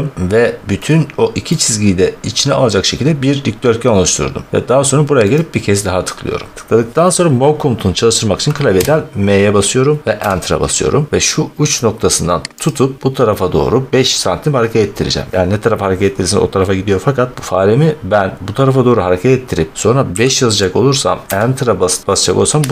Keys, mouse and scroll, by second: 1.4 middle click, 5.3 click, 8.6 m, 10.1 Return, 12.6 click, 17.2 click, 20.0 5, 21.2 Return.